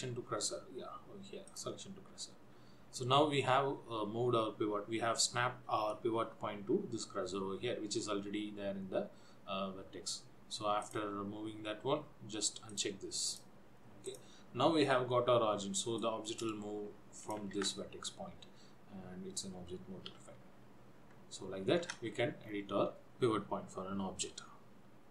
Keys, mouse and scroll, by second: 10.9 click, 13.7 click, 14.2 click, 16.2 click, 17.7 ctrl+z, 20.3 r, 22.5-23.1 scroll down 2.